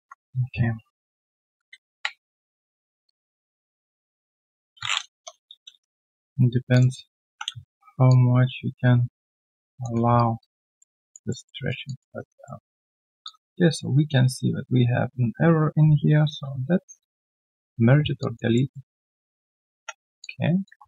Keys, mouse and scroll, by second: 1.4 1, 1.4 ctrl+shift+x, 2.0 ctrl+s, 3.0 shift+click, 4.3 shift+click, 5.1 Return, 5.7 q, 5.8 right click, 7.2 typing, 8.0 ctrl+shift+click, 10.1 alt+right click, 10.6 alt+middle click, 10.9 alt+click, 11.3 alt+middle click, 11.6 alt+right click, 11.8 alt+click, 12.1 alt+right click, 12.4 alt+middle click, 16.2 q, 18.2 alt+click, 18.5 alt+middle click, 19.4 alt+right click, 20.1 3, 20.2 alt+click, 20.7 alt+1.